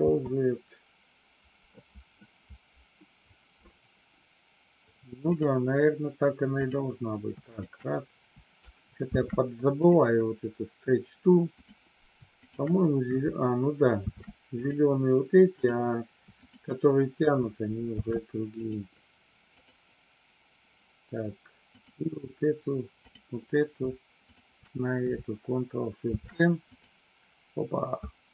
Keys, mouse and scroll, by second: 0.0 ctrl+z, 5.2 click, 6.5 click, 7.4 shift+click, 9.1 ctrl+shift+c, 11.5 click, 12.5 shift+click, 13.8 ctrl+shift+c, 15.5 click, 16.4 shift+click, 17.8 ctrl+shift+c, 21.6 click, 23.0 click, 24.1 shift+click, 26.1 ctrl+shift+c.